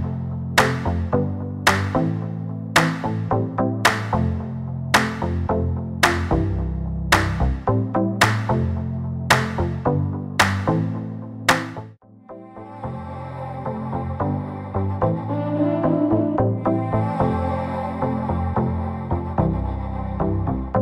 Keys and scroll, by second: 1.3 space, 1.4 Escape, 9.2 l, 10.4-12.5 typing, 13.6 space, 14.1 p, 15.8 space, 16.6 m, 17.9 1, 18.2 0, 18.5 Return, 18.8 space.